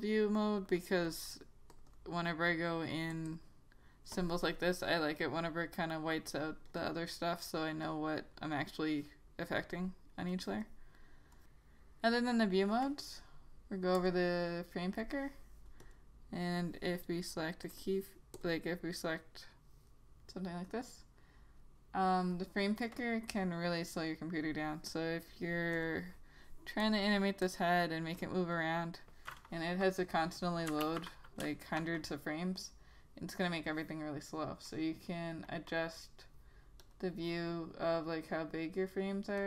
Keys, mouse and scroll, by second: 2.0 double click, 3.3 click, 3.4 double click, 6.8 click, 6.9 double click, 8.0 click, 8.7 double click, 10.4 click, 14.1 click, 17.8 double click, 18.5 click, 25.9 click, 31.0 ctrl+z, 34.8 click, 35.8 double click, 37.0 click.